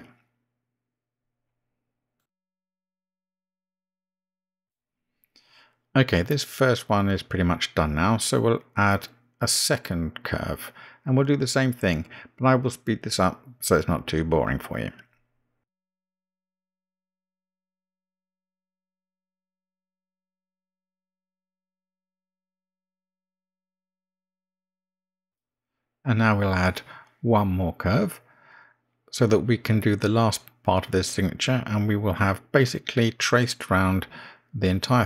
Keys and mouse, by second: 0.8 g, 3.2 click, 3.5 g, 4.2 click, 4.5 g, 7.3 click, 7.6 g, 14.2-15.9 drag, 16.5 g, 17.1 g, 18.2-22.0 typing, 23.5 right click, 24.0 click, 24.3 g, 26.1 g, 29.6-34.4 drag.